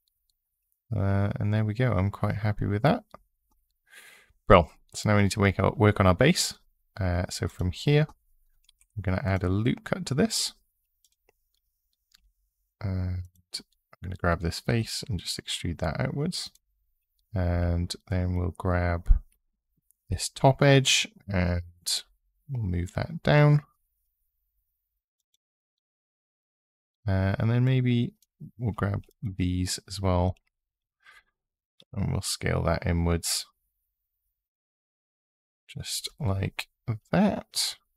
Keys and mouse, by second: 8.5 ctrl+r, 9.0 click, 10.8 click, 11.9 4, 12.3 3, 13.0 click, 14.5 e, 16.2 click, 17.3 2, 19.8 g, 21.9 z, 24.9 click, 25.5 click, 27.4 click, 29.9 shift+click, 31.6 s, 35.7 click, 36.0 click.